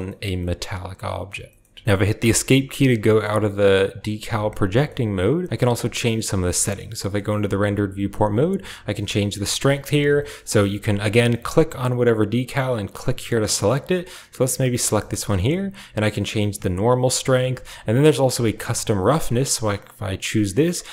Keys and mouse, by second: 2.9 shift+click, 3.5 shift+click, 4.6 shift+click, 5.8 drag, 6.0 z, 6.8 shift+click, 8.7-9.7 drag, 11.1 click, 12.0 click, 13.8 click, 14.8 shift+click, 15.9-17.4 drag, 18.3 click, 19.5-20.9 drag.